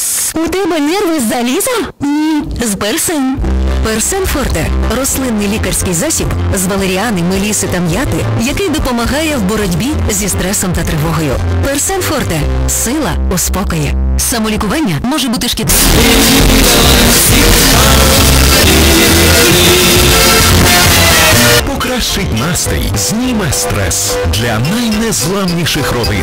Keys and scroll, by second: 1.6 m, 1.8-2.7 Down, 2.9 Down, 3.1 Down, 3.3 Down, 4.1 Down, 4.2 Down, 21.7 Page_Down.